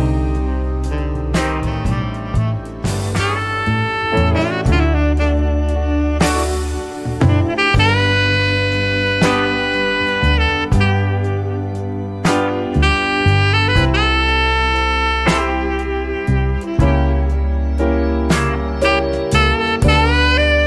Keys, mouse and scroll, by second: 0.3 4, 1.3 click, 2.3 click, 3.6 click, 4.6 click, 5.0 middle click, 5.7 click, 6.5 click, 7.5 click, 8.6 0, 9.5 click, 11.6 x, 11.9 0, 13.4 click, 14.4 y, 14.8 0, 15.8 click, 16.8-17.7 typing, 18.4 click, 19.2-20.0 scroll down 1.